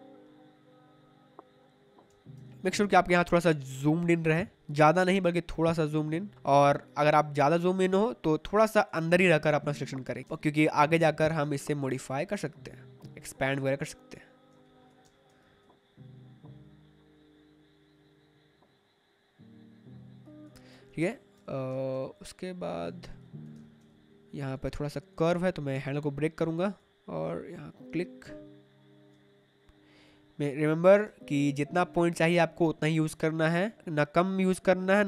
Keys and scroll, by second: 2.0 space, 4.3 space, 8.9 space, 12.8 space, 20.9 space, 23.4 space, 28.1 space, 29.5 space, 31.0 space.